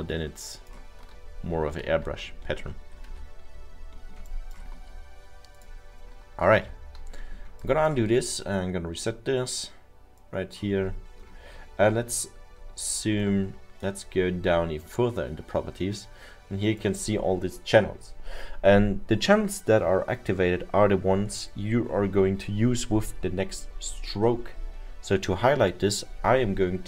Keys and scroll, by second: 1.2 ctrl+z, 1.4 ctrl+z, 1.6 ctrl+z, 3.2 ctrl+y, 5.1 ctrl+y, 7.2 ctrl+z.